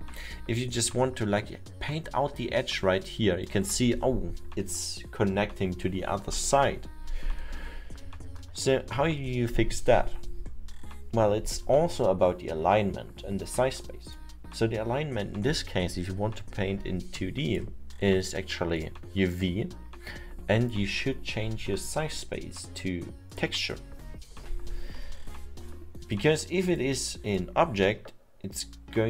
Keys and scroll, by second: 1.8 ctrl+z, 8.1 ctrl+z, 10.9 ctrl+z.